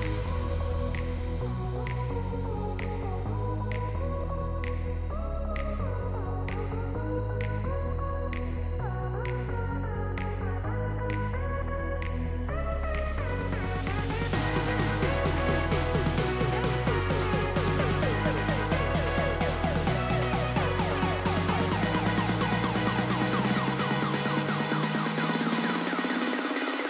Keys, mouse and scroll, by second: 0.0 right click, 1.8 right click, 4.2 middle click, 6.2 right click, 8.4 right click, 9.4 scroll down 1, 9.6 middle click, 11.2 right click, 13.0-13.5 scroll down 1, 13.5 middle click, 14.8 right click, 16.0 middle click, 17.2 right click, 20.6 right click.